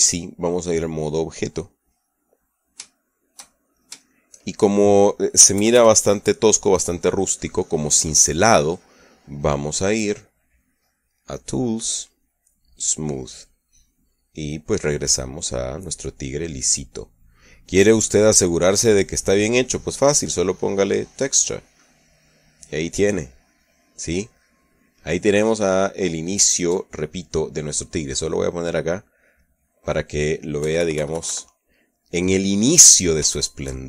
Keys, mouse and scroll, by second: 1.2 click, 2.2 click, 2.9-4.7 middle drag, 4.9 shift+middle click, 6.4 KP_Add, 7.5-9.9 middle drag, 12.4 click, 14.0 click, 14.9-17.3 middle drag, 17.3 scroll up 1, 17.5-18.8 middle drag, 18.9 middle click, 20.7 click, 21.9 click, 22.6-27.7 middle drag, 29.3 click, 31.5 KP_Subtract, 32.3-33.8 middle drag.